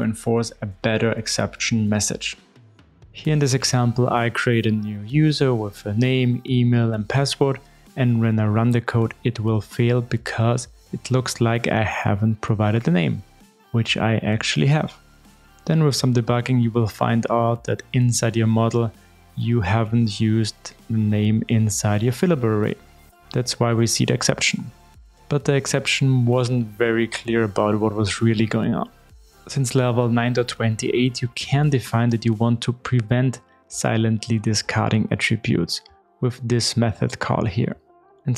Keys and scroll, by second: 29.5 super+e, 31.8 Tab, 33.1 super+v.